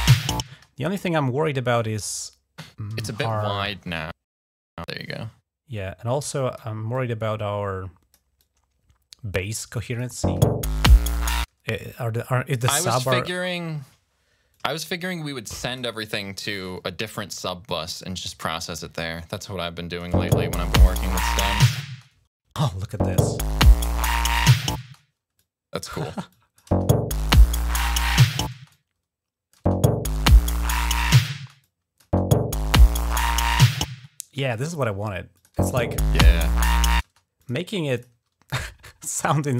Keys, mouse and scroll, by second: 0.4 space, 3.1-6.4 drag, 6.7-7.9 drag, 8.2-9.8 drag, 10.0 space, 11.3 space, 14.3-15.6 drag, 16.5-18.6 drag, 18.9 click, 20.0 space, 22.8 space, 24.6 space, 25.1 click, 26.1 click, 26.5 space, 28.4 space, 28.5 click, 29.3 space, 31.1 space, 31.4 click, 31.8 space, 33.7 space, 35.1 click, 35.3 space, 36.8 space, 37.2 click, 37.5 click, 37.7 click.